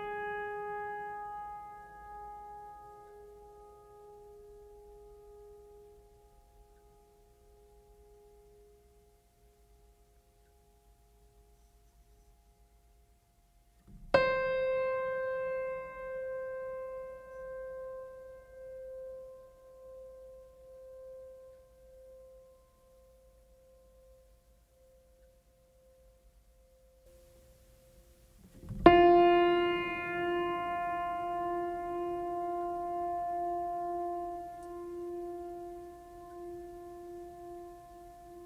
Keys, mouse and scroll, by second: 0.5 click, 6.1 click, 6.2 click, 18.4 click, 33.3-34.3 drag.